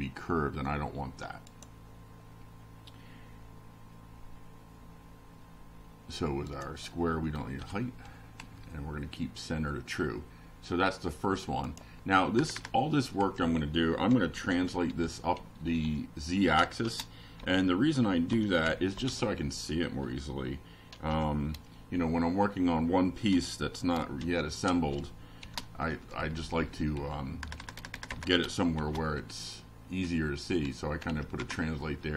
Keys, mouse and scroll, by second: 0.0 BackSpace, 1.0 Down, 4.0 click, 4.7 Return, 5.4 Up, 6.0-13.1 typing, 14.7 ], 15.5 shift+0, 16.0 shift+space, 16.6 shift+[, 17.2 shift+Down, 18.5 Return, 19.7 shift+], 20.1 shift+Up, 21.4 Down, 21.8 Home, 22.1 Return, 23.4 F5, 25.0 click, 25.8 click, 26.6 Left, 29.3 Left, 30.8 [, 31.0 Right.